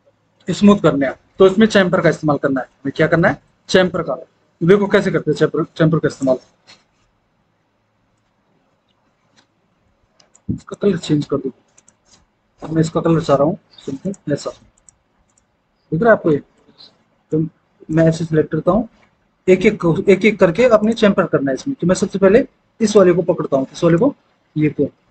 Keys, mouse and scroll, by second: 5.4 F4.